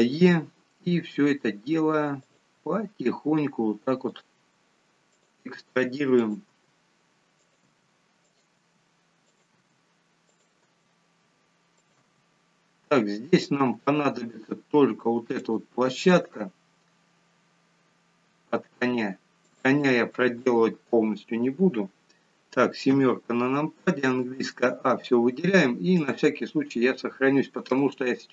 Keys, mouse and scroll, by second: 2.6 e, 4.4 e, 5.6 e, 6.6 e, 7.7 e, 8.7 e, 9.6 e, 10.7 e, 12.1 e, 13.8 e, 15.9 e, 21.5-22.6 scroll down 4, 23.0 KP_7, 24.1 a, 26.0 click.